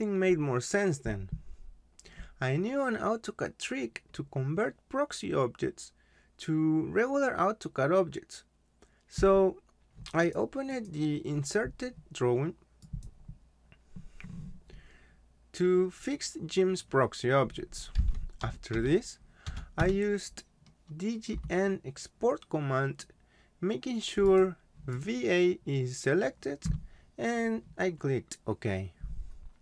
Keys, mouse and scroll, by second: 9.9 click, 10.7 right click, 12.8 click, 17.7-19.8 typing, 21.3 Return, 24.2 click.